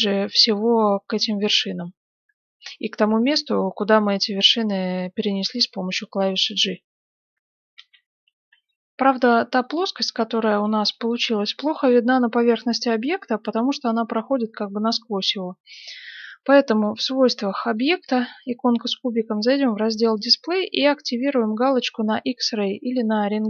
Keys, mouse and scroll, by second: 5.4 g, 7.7 F9, 9.6-12.8 middle drag, 12.8-13.5 scroll up 1, 13.5-14.0 scroll up 1, 17.7-19.4 drag, 19.2-21.2 scroll down 1, 21.2 scroll down 1, 22.9-23.4 drag, 22.9-23.4 middle drag.